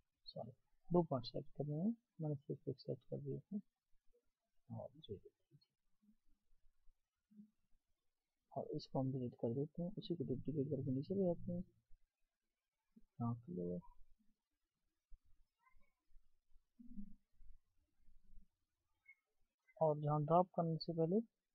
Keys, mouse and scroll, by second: 2.1 shift+click, 9.3 Delete, 13.1 Delete.